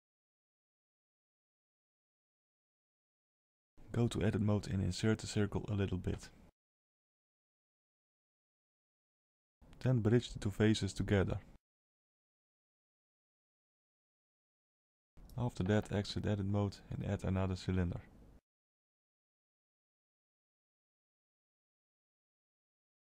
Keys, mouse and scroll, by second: 1.1 middle click, 2.1-2.9 scroll up 3, 2.9 Tab, 2.9-3.8 scroll up 2, 3.8 3, 4.2 click, 4.7 middle click, 6.1 shift+click, 6.5 shift+middle click, 7.0 middle click, 8.4 i, 9.7 right click, 12.0 Tab, 12.6 alt+a, 13.4 shift+a, 22.9 middle click.